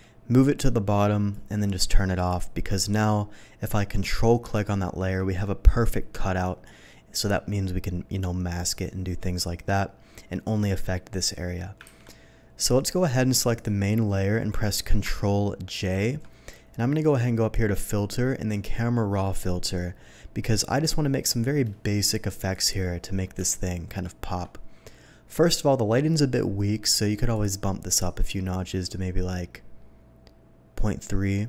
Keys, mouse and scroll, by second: 0.5 shift+click, 2.1 shift+click, 4.5 ctrl+click, 12.0 ctrl+d, 13.5 alt+click, 15.7 ctrl+j, 17.5 click, 18.5 click, 23.8 alt+middle click, 24.0 alt+middle click, 27.3 click, 28.9-31.4 drag.